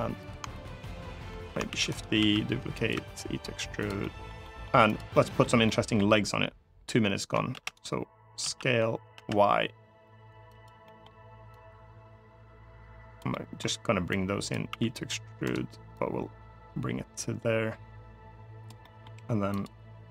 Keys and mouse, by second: 0.0 click, 1.1 middle click, 1.5 shift+d, 1.7 right click, 1.9 s, 2.5 click, 3.6 click, 3.6 e, 3.8 middle click, 4.2 middle click, 4.7 click, 4.9 middle click, 5.4 middle click, 7.3 shift+d, 7.4 click, 8.2 s, 8.9 y, 10.3 click, 10.6 middle click, 11.3-12.9 drag, 13.1 middle click, 13.9 click, 14.5 e, 15.1 right click, 15.7-18.4 drag, 18.5 middle click, 19.3 click, 19.9 middle click.